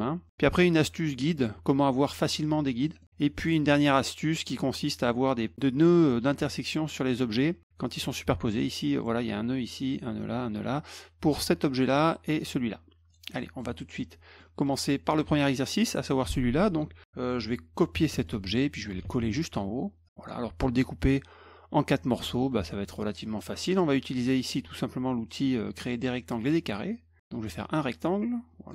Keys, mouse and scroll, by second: 3.0 middle click, 11.7 click, 12.4 click, 13.1 click, 13.4 middle click, 13.8 middle click, 14.4 middle drag, 15.6 click, 18.1 ctrl+c, 18.2 middle drag, 19.3 middle click, 20.0 click, 22.5 middle click, 26.4 click, 27.3-28.7 drag.